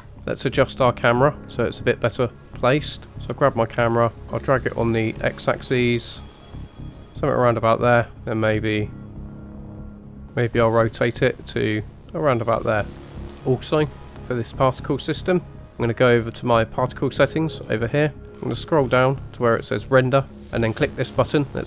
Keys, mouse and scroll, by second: 0.1-1.3 drag, 1.4 shift+middle click, 2.4 click, 4.2 click, 5.1-7.0 drag, 8.3-12.9 drag, 14.0 click, 16.7 click, 17.5-20.3 scroll down 11.